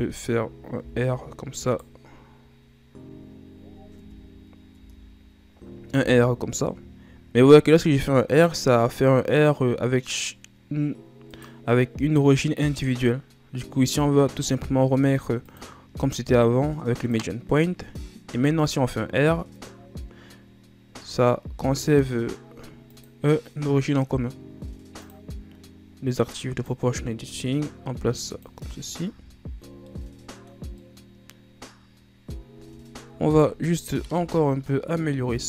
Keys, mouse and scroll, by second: 0.0 a, 0.9 r, 4.1 Tab, 4.8 Tab, 6.1 r, 15.6-18.5 drag, 18.5 r, 25.1 click, 26.3-28.8 drag, 28.8-29.2 ctrl+scroll down 1, 29.2 Tab, 29.8 scroll down 2, 30.0-32.5 middle drag, 32.5 KP_1, 32.9-34.3 scroll up 6, 34.3 Tab, 34.9 scroll down 2, 35.1-35.4 middle drag.